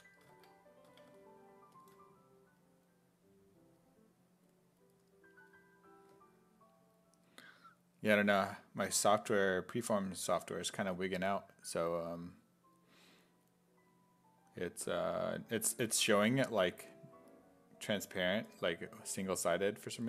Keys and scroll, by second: 0.9 alt+Tab.